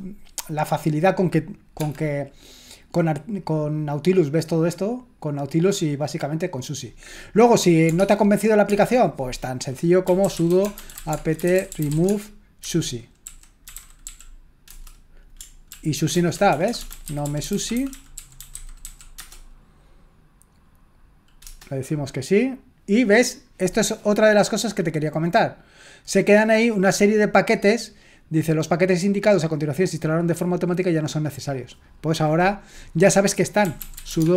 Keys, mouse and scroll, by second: 1.0 click, 1.8-2.9 drag, 5.6-6.8 drag, 8.0 alt+Tab, 8.6 alt+Tab, 10.0-14.5 typing, 14.6 Return, 15.7 ctrl+p, 16.1-19.3 typing, 21.4 Return, 25.1-27.9 drag, 33.4-34.3 typing.